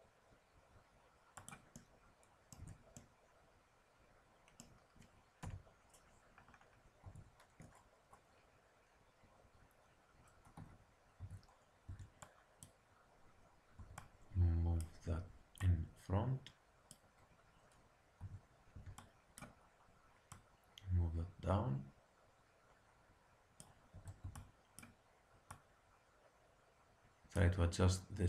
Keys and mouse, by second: 2.5 Tab, 3.8 click, 4.1 click, 4.5 click, 4.7 click, 5.3 KP_1, 7.0 Tab, 11.1 z, 11.1 a, 11.8 b, 13.7 b, 15.6-17.5 drag, 17.5 middle click, 18.2 a, 18.7 b, 20.2-22.2 drag, 23.9 a, 24.1 b, 25.5-27.4 drag.